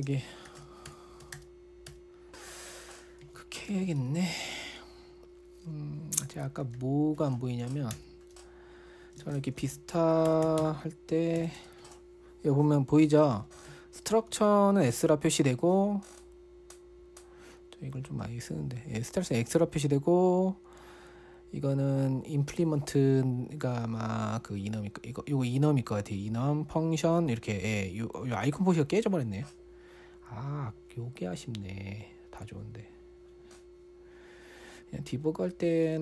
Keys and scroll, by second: 0.6-4.7 typing, 6.5-8.4 typing, 9.4-10.8 typing, 11.0 Tab, 11.8 Tab, 12.0 Return, 14.0 ctrl+l, 14.7 typing.